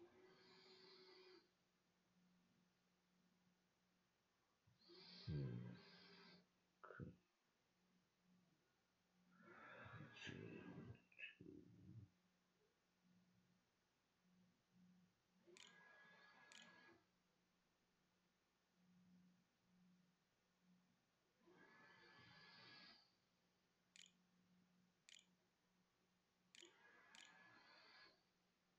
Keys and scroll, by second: 11.4 space, 11.6 c, 14.4-17.6 typing, 23.5 space, 24.7-28.7 typing.